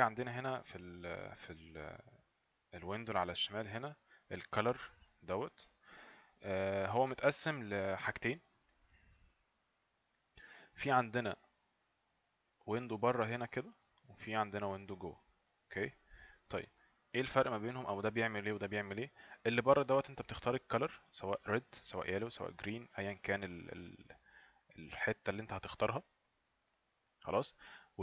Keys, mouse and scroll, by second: 8.7 click, 11.6 click, 17.8 click, 23.6 click.